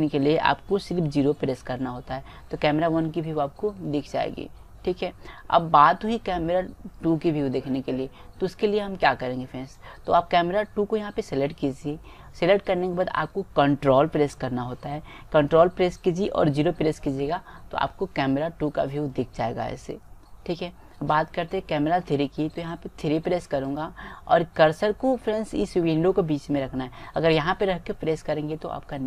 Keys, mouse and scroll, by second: 1.5 KP_0, 7.1-8.8 drag, 9.2-12.0 middle drag, 17.2 ctrl+KP_0, 23.8-25.7 right drag.